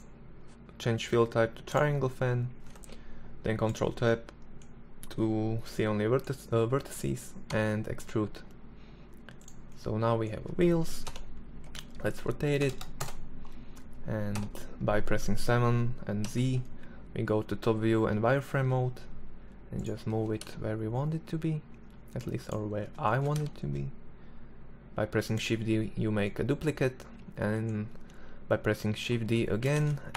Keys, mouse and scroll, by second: 2.2 ctrl+Tab, 5.1-7.2 drag, 6.9 e, 9.1 click, 10.5 ctrl+l, 11.0 r, 13.7 KP_7, 15.6 z, 17.5 g, 19.5 g, 22.5 shift+d, 29.1 shift+d.